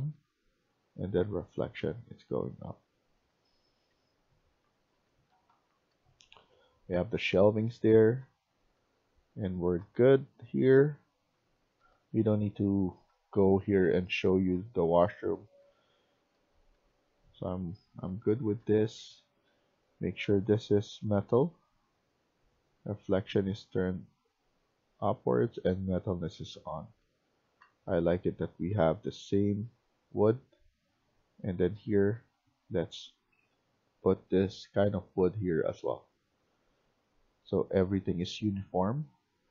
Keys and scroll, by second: 3.7 Escape, 4.0 Escape, 4.4-19.4 typing, 26.7-34.8 typing, 38.4-39.5 typing.